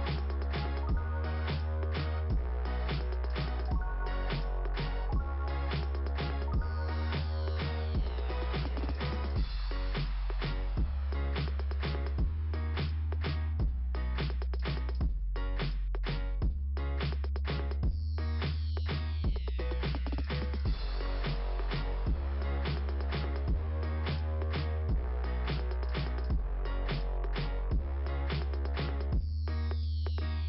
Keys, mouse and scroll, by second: 1.4 click, 6.7 click, 7.1 click, 7.4 click, 8.6 click, 8.7 click, 8.8 click, 8.9 click, 12.6-13.4 scroll down 1, 13.9 click, 15.1 click, 17.0 click, 17.5 click, 17.8 click, 18.1 click, 19.7 click, 23.4 click, 25.4 click.